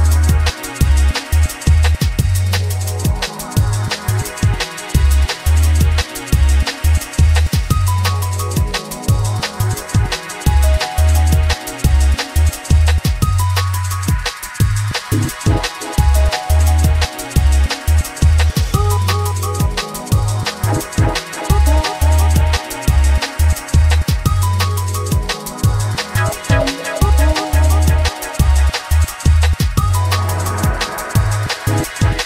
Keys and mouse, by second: 0.3 shift+a, 3.2-5.6 typing, 3.5 click, 4.2 click, 4.8 click, 5.4 click, 6.6 click, 7.0 r, 7.5 click, 8.1 g, 8.3 click, 9.1 alt+middle click, 10.3 r, 10.4 click, 10.9 g, 11.6 drag, 12.3 alt+middle drag, 14.0 Tab, 14.2 3, 14.3 click, 15.0 a, 15.8 g, 16.3 shift+click, 17.1 click, 17.4 g, 18.0 click, 18.7 3, 18.8 click, 19.1 alt+middle click, 19.8 g, 20.4 click, 21.1 alt+middle click, 22.3 g, 22.7 click, 23.8 g, 24.0 click, 24.2 s, 25.6 click, 25.9 g, 26.3 shift+click, 26.6 alt+middle click, 27.8 ctrl+r, 30.0 click, 30.5 Tab, 31.7 click, 31.8-32.2 drag.